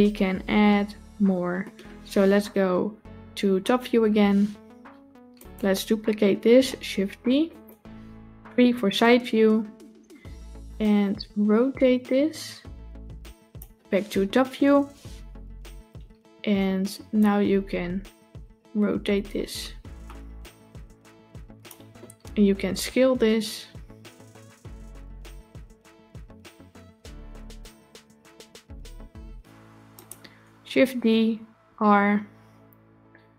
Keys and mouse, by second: 3.8 KP_7, 5.2 click, 6.9 shift+d, 8.5 KP_3, 10.6-13.5 drag, 14.5 KP_7, 17.0-21.5 drag, 22.7 s, 30.8 shift+d.